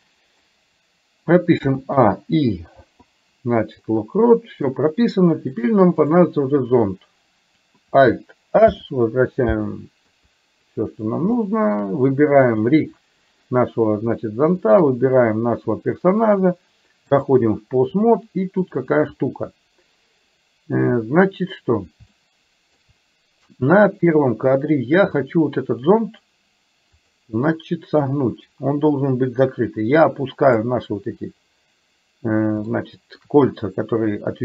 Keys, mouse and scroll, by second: 1.7 a, 2.8 i, 3.8-4.8 middle drag, 5.7 click, 8.7 alt+h, 10.1 KP_3, 11.4 shift+middle click, 12.4 click, 14.7 shift+click, 16.3-17.4 drag, 18.7 click, 22.2 shift+middle click, 27.1 click, 28.1-30.8 drag, 32.7 shift+middle click.